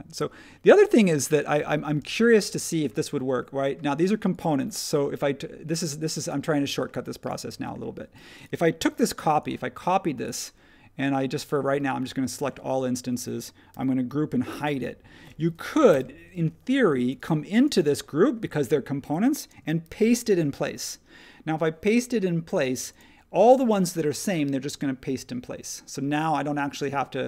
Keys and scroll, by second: 2.0 space, 8.8 super+c, 13.7 super+g, 14.5 super+e, 15.9 n, 19.8 shift+v.